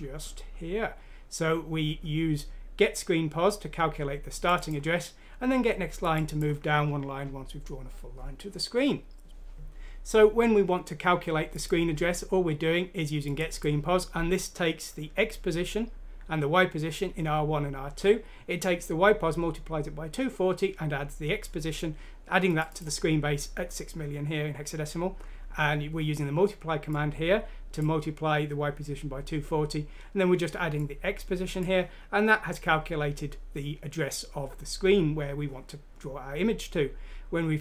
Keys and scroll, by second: 9.1 BackSpace.